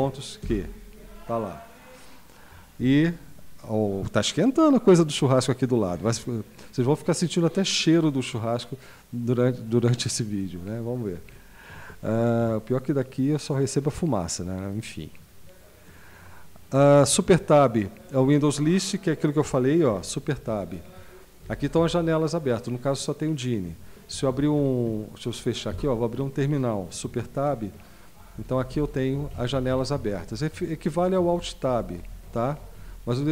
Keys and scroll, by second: 0.4 Return, 11.3 super+q, 20.3 super+Tab, 21.7 Up, 24.9 Escape, 25.7 super+Return, 27.3 super+Tab, 28.3 Down, 28.5 Down, 28.7 Up, 28.9 Down, 29.1 Up, 29.3 Down, 29.5 Up, 29.7 Down, 30.2 Down, 30.5 Up, 30.9 Down, 31.1 Up, 31.3 Down, 31.7 Up, 32.0 Down, 32.2 Up, 32.7 Up, 33.1 Down.